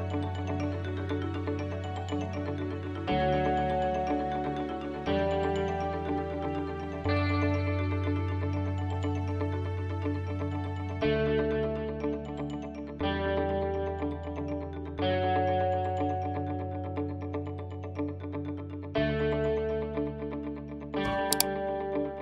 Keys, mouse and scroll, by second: 1.4 Tab, 1.6 Tab, 2.0 KP_1, 2.7-4.5 middle drag, 4.5 a, 4.9 a, 5.2 Tab, 5.8 g, 7.5 r, 9.1 s, 9.7 g, 10.6 Tab, 11.0-12.8 middle drag, 12.8 h, 13.8 KP_1, 14.7 ctrl+space, 15.0-15.7 middle drag, 15.8 shift+middle drag, 16.8 shift+middle click, 17.1-17.5 middle drag, 19.0 ctrl+s.